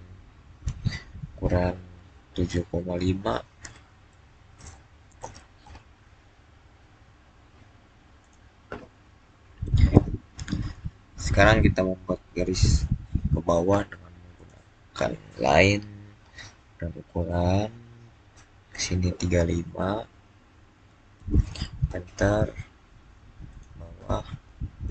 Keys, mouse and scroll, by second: 3.5 scroll up 1, 4.7-5.5 typing, 5.5 Return, 6.4-8.1 scroll down 1, 8.1 click, 12.3-12.6 scroll up 1, 14.2 click, 17.5 click, 19.3-19.7 scroll up 1, 20.7-21.0 typing, 21.7 Return, 23.4 click.